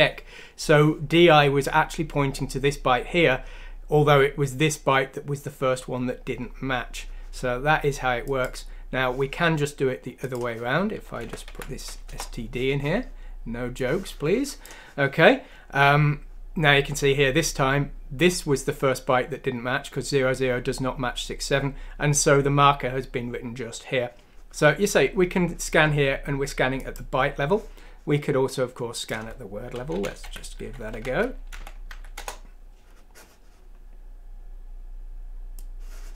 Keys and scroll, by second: 11.2 Delete, 11.4 F6, 12.0 Return, 30.1 Up, 30.2 ;, 30.5 Down, 30.9 Left, 31.5 Delete, 31.9 F6, 32.1 Return.